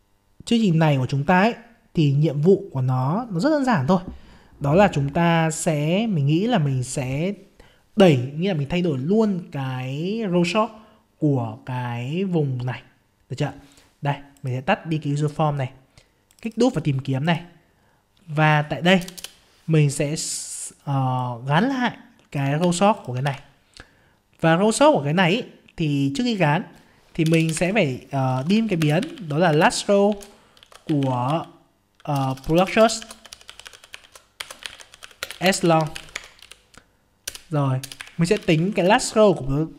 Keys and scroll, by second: 22.6 ctrl+c, 23.2 ctrl+v, 29.5 ctrl+space, 38.7 ctrl+space.